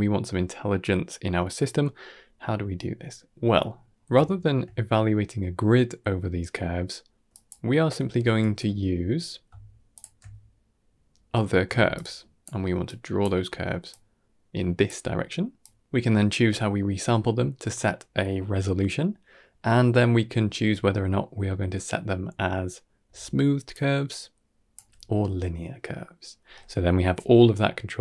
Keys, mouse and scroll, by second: 3.3 middle drag, 3.8 scroll up 2, 4.1 shift+middle drag, 7.2 drag, 8.3 x, 9.8 alt+shift+click, 10.7-11.2 middle drag, 11.5 d, 11.8 click, 12.3-12.7 d, 12.7 click, 13.1 d, 13.2 d, 13.8 click, 14.9-16.6 typing, 15.5 click, 22.9 d, 23.4 d, 23.6-24.6 drag, 23.6 d, 24.6 d, 24.7 d.